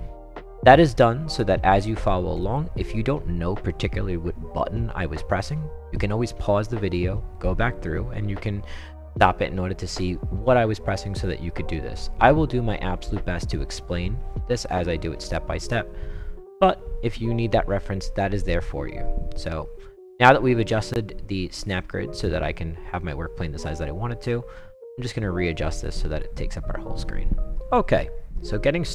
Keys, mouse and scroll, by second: 19.8-26.2 drag.